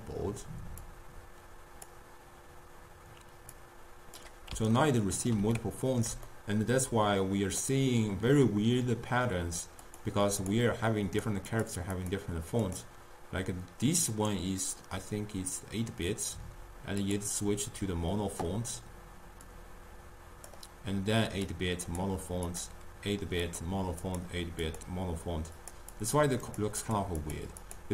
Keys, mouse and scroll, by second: 0.9-5.0 drag, 5.0-9.4 ctrl+middle drag, 9.9 click, 10.4 click, 11.1 click, 11.5 click, 12.0 click, 12.7 click, 17.3 click, 19.5-21.6 drag, 22.0 click, 22.5 click, 23.5 click, 24.1 click, 24.7 click, 25.8 click, 26.5 click, 27.0 click, 27.3 click.